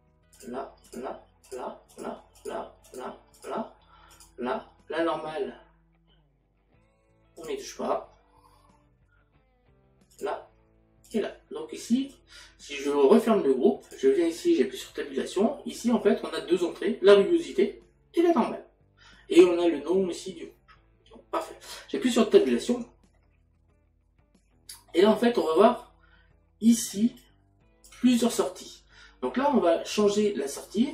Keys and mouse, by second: 0.4 click, 8.4 click, 13.9 click, 21.7 click, 27.2 click.